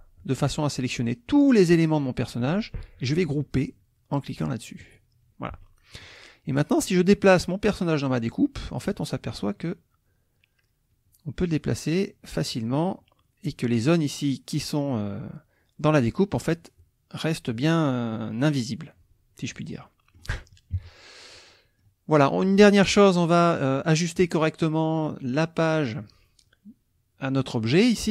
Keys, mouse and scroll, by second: 4.8 click, 5.6 click, 6.8-9.2 drag, 9.5-14.0 drag, 16.3-17.7 drag, 19.5 click, 19.9 click, 20.7 -, 21.5 click, 22.2 click.